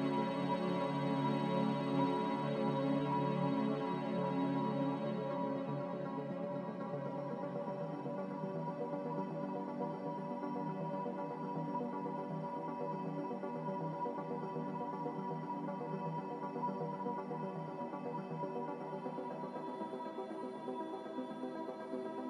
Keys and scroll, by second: 10.2 z, 11.9 3, 12.1 Return, 14.4 3, 14.5 Return, 20.9 2, 21.1 Return.